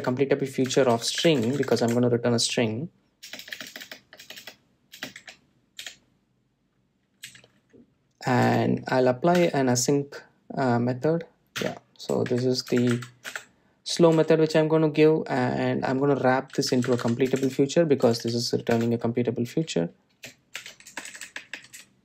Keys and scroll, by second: 1.4 Return, 10.8 Return, 12.9 Return, 14.7 Delete.